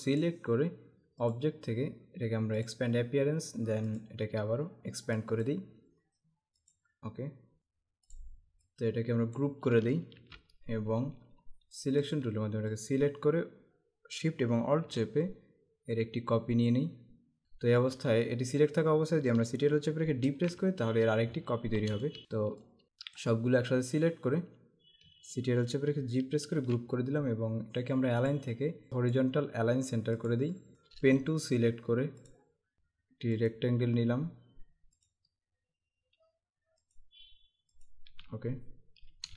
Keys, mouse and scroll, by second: 1.4 click, 2.8 click, 4.1 click, 5.3 click, 6.7 click, 10.2 ctrl+g, 12.1 click, 17.4 click, 17.7 space, 20.3 ctrl+d, 21.5 alt+scroll down 1, 22.0 space, 22.1 click, 22.2 space, 22.6 click, 26.6 ctrl+g, 28.4 click, 30.3 click, 30.7 space, 32.4 click, 33.3 click, 35.0 click, 36.8 click, 38.7-39.1 scroll up 1.